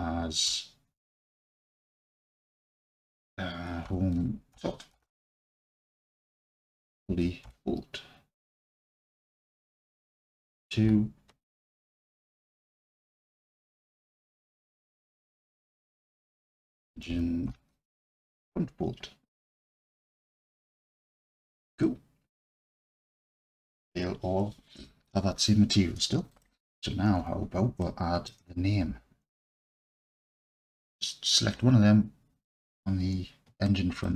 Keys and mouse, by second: 2.0 BackSpace, 2.2 BackSpace, 6.7 l, 9.9 click, 10.8 F2, 13.9 BackSpace, 14.4 BackSpace, 20.8-21.3 alt+drag, 21.9-22.3 drag, 26.3 click, 27.2 Tab, 27.8-28.3 alt+drag, 30.7 click, 33.7 alt+click.